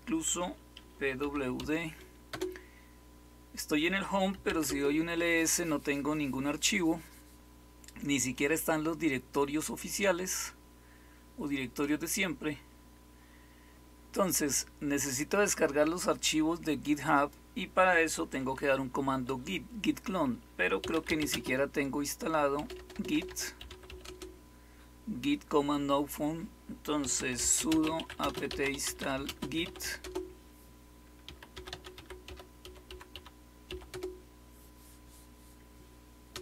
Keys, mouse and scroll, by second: 0.0-2.2 typing, 4.0-4.9 typing, 10.2 click, 11.2-13.7 scroll down 6, 13.7-17.1 scroll down 1, 17.1 click, 20.5-24.3 typing, 26.7-33.8 typing, 36.2 typing.